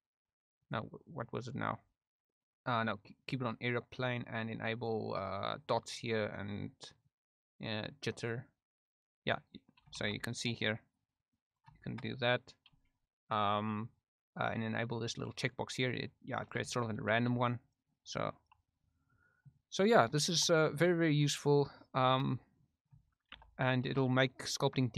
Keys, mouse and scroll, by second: 0.7-3.3 drag, 4.8-5.7 drag, 7.1-8.2 drag, 8.6 click, 10.0 shift+f, 10.6 click, 11.1 click, 11.8 shift+middle click, 15.5 click, 16.7 shift+middle click, 17.3 f, 17.8 click, 18.7 middle click, 19.2 middle click, 19.5 click, 20.2 shift+click, 20.8 click, 23.3 shift+d, 23.9 shift+f, 24.6 click.